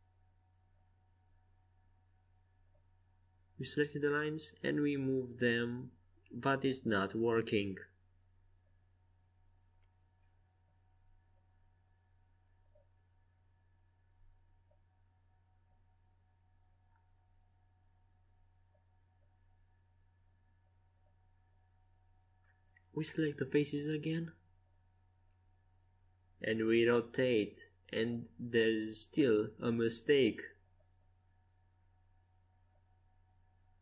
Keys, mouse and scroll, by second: 0.6-4.7 right drag, 3.7 click, 4.7-6.0 middle drag, 8.8 ctrl+z, 9.7 ctrl+z, 11.1-13.1 middle drag, 23.2-25.7 drag, 24.3-27.0 right drag, 27.0 r, 31.8-33.8 right drag.